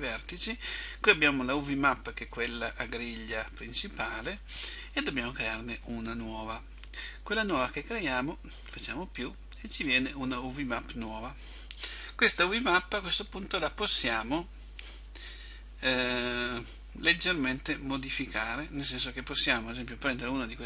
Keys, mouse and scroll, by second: 9.3 click, 13.1 click.